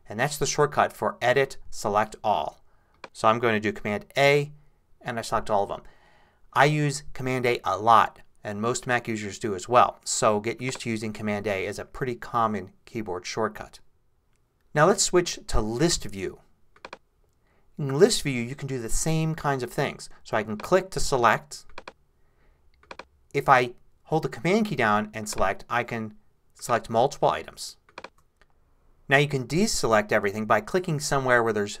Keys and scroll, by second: 4.2 super+a.